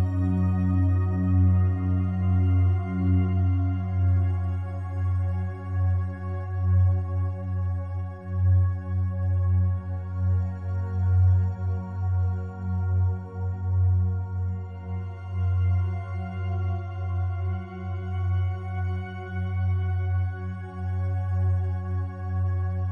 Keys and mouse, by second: 0.6 h, 1.6 ctrl+z, 2.1 g, 2.2 g, 3.3 click, 5.8 ctrl+z, 6.9 click, 8.1 alt+click, 9.4 3, 10.0-11.9 ctrl+alt+drag, 12.2 f, 12.6 click, 13.5-14.6 drag, 15.1 click, 15.8 click, 16.4 click, 16.8 click, 17.2 click, 17.6 click, 17.9 click, 18.2 click, 18.5 click, 19.0 f, 19.7 click, 20.5 click, 21.2 typing, 22.3 click, 22.8 click.